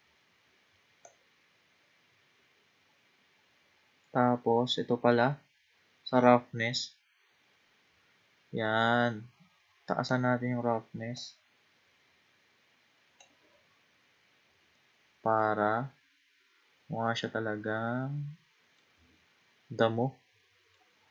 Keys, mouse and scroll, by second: 1.0-4.1 drag, 11.2-13.9 drag, 13.9-14.6 scroll down 2, 14.8 middle click, 15.7-16.6 scroll up 4, 16.6 scroll down 1, 17.2-19.2 middle drag, 19.2-19.8 scroll down 1, 19.8-21.1 middle drag.